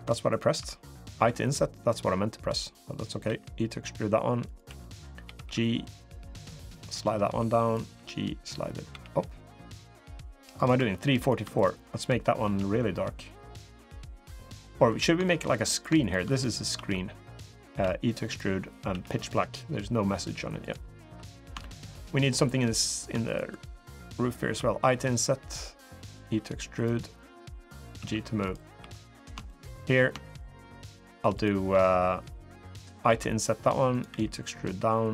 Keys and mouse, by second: 0.1 shift+click, 0.9 i, 3.0 e, 4.4 2, 5.0 g, 7.1 2, 7.4 click, 7.7 g, 10.5 3, 11.3 shift+click, 12.2 g, 14.6 3, 15.0 shift+click, 15.5 click, 16.5 i, 17.6 e, 18.7 g, 20.8 3, 21.4 shift+click, 21.7 middle click, 21.8 click, 21.8 middle click, 22.5 click, 23.3 shift+click, 24.3 i, 26.0 e, 27.7 g, 28.5 3, 28.8 click, 29.2 shift+click, 30.4 shift+click, 31.1 shift+click, 32.8 i, 33.8 e.